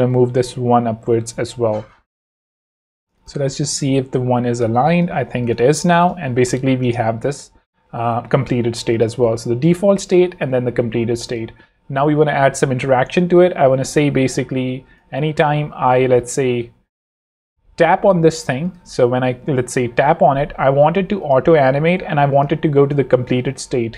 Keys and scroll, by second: 2.5 shift+z, 3.5 z, 3.8 shift+v, 5.2 shift+z, 5.8 z, 6.3 v, 6.5 space, 12.3 alt+2.